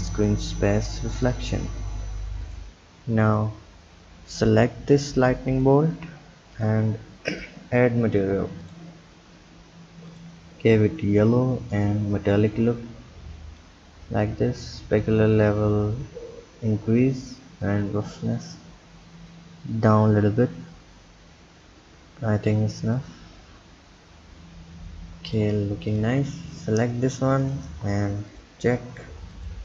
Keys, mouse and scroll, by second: 0.2-3.5 drag, 3.8-4.5 scroll up 3, 5.2-6.8 drag, 7.5-8.8 drag, 11.9-17.6 drag, 17.8-20.8 drag, 23.1-26.2 drag, 27.6 click, 28.4 click.